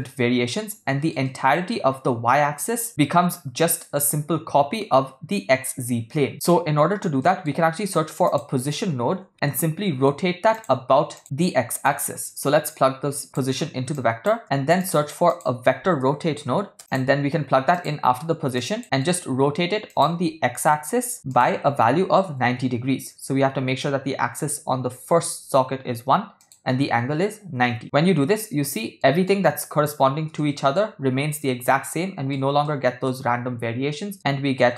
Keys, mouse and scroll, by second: 0.7-1.1 shift+middle drag, 1.2-1.7 middle drag, 6.3 middle click, 7.2 middle click, 7.7 shift+a, 11.9-13.4 drag, 14.0 click, 14.5 shift+a, 16.8 BackSpace, 18.6 click, 18.8 middle click, 20.0 click, 21.3-22.4 drag, 26.4-27.7 drag, 28.5 middle click, 30.4-30.8 shift+middle drag, 31.4 middle click, 32.7-33.1 shift+middle drag, 34.1-34.7 middle drag.